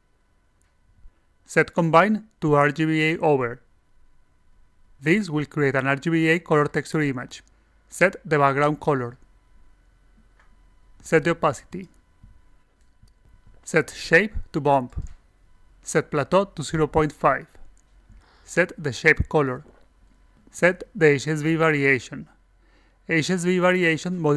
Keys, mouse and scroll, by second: 1.1 click, 3.4 click, 3.9 click, 4.4-5.4 drag, 5.9 click, 6.0 c, 7.1 click, 7.6 click, 8.2 click, 8.2 ctrl+c, 8.6 click, 9.0 click, 9.2 c, 9.9 click, 11.5 click, 13.5 click, 14.4 click, 15.3 click, 16.2 click, 17.8 click, 19.1 click, 19.4 ctrl+v, 21.1 click, 23.0 click.